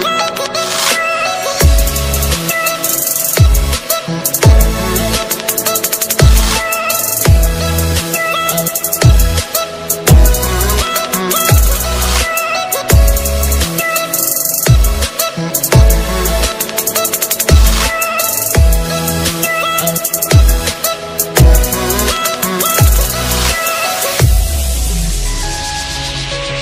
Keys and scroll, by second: 10.7 ctrl+space, 14.2 alt+space, 18.3 ctrl+space, 19.8 alt+space, 23.5 ctrl+space.